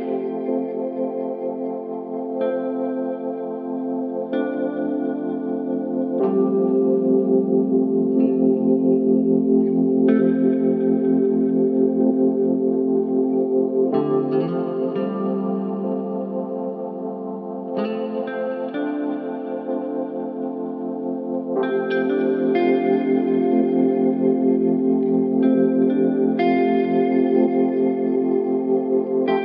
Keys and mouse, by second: 0.5 click, 3.5 click, 5.1 click, 6.2 Tab, 8.5 click, 11.2 middle click, 14.1 alt+a, 15.7-16.3 middle drag, 16.7-17.7 middle drag, 17.9 ctrl+s, 20.7 alt+z, 22.0-22.9 middle drag.